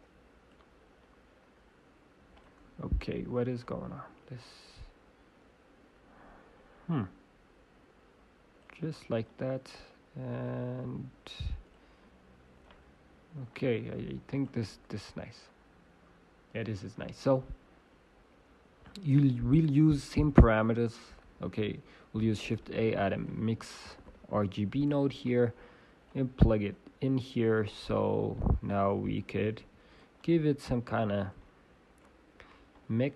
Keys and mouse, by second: 1.0-5.6 drag, 9.2-11.2 drag, 11.6-16.3 drag, 20.1 click, 20.1 m, 20.3 i, 21.0 ctrl+z, 23.9 shift+a, 27.4-32.3 drag, 28.3-31.9 right drag, 30.1 g, 32.2 right click, 32.3 middle click, 33.0 click, 33.0 right click.